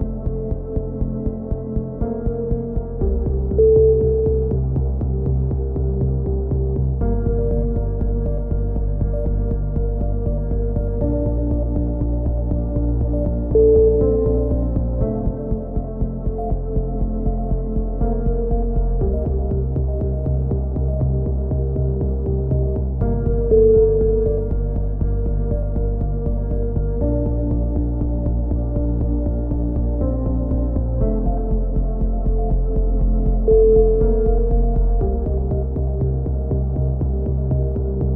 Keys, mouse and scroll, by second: 0.7-2.0 right drag, 1.7 alt+m, 2.6-3.8 drag, 3.5 alt+m, 4.1 a, 4.4 click, 5.2 KP_3, 8.2-9.5 right drag, 8.9 x, 9.8 KP_3, 10.3 a, 12.6-13.7 drag, 13.7 right click, 14.1 x, 14.7 Tab, 14.7 middle click, 15.2 click, 16.1 middle click, 17.6 middle click, 18.1 click, 19.4 ctrl+KP_7, 20.7 Tab, 20.9 z, 21.4 middle click, 21.9 a, 23.2 middle click, 23.9 z, 24.3-26.3 middle drag, 25.9 z, 26.3 z, 26.9-28.3 drag, 27.6 z, 28.9 ctrl+z, 30.6-33.8 drag, 36.4 a, 36.9 z, 37.1 click.